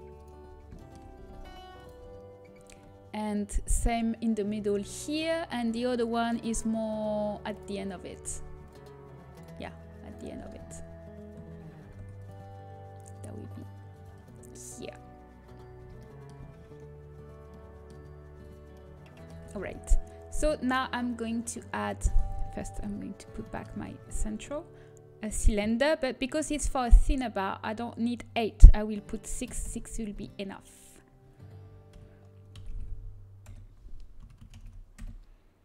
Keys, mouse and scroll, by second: 0.7 middle click, 1.1 g, 2.4-4.4 middle drag, 7.5-8.6 drag, 12.3 ctrl+r, 14.7-17.9 middle drag, 18.4 middle click, 19.5 shift+a, 21.9-24.7 right drag, 23.2 shift+c, 24.7 shift+a, 31.8 r, 34.4 r.